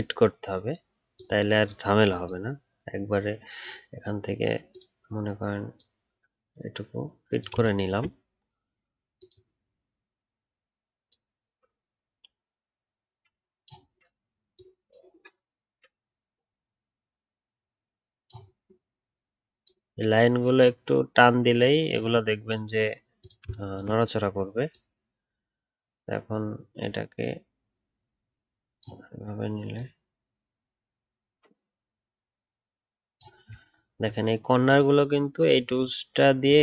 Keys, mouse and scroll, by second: 33.7 alt+scroll up 3.